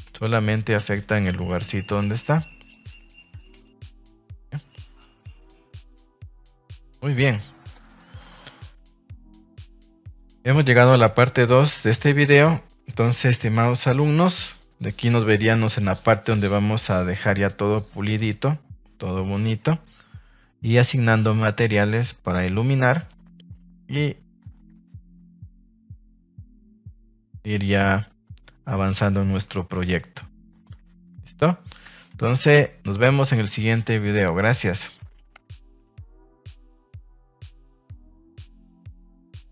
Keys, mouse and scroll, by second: 0.2 a, 1.1 ctrl+s, 2.7 right click, 3.5 a, 3.7 a, 6.1 shift+middle drag, 7.8 shift+middle click, 8.9 ctrl+s, 9.7 middle click, 10.3 middle click, 11.2 ctrl+s, 23.4-24.4 middle drag, 24.5 shift+middle drag, 25.1-25.4 middle drag, 25.6 shift+middle drag, 26.3-26.7 middle drag, 26.8 shift+middle drag, 27.2-27.7 middle drag, 27.9-28.2 middle drag, 28.4-28.8 middle drag, 29.4 KP_0, 30.5 shift+middle click, 31.4 shift+middle click, 32.3 ctrl+s.